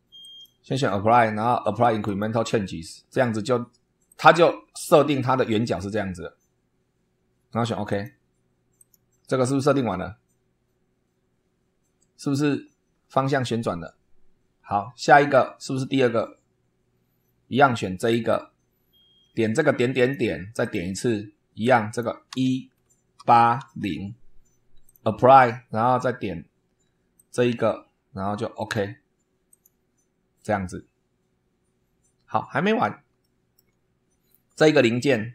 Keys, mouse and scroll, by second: 0.2 click, 2.0 click, 4.0 click, 7.8 click, 8.7 click, 17.9 click, 19.9 click, 20.6 click, 21.6 click, 22.2 1, 23.1 8, 23.6 0, 24.8 click, 27.1 click, 28.5 click, 29.4 click, 32.4 scroll down 1, 33.2 shift+middle click, 33.8-34.3 shift+scroll up 1.